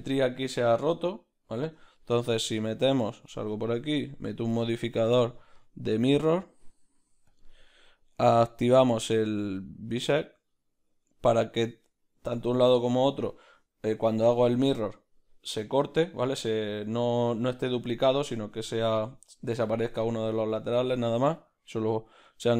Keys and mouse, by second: 0.0-7.4 middle drag, 0.5 ctrl+z, 3.1 Tab, 7.4-17.5 drag, 17.5-22.5 middle drag, 17.5 z.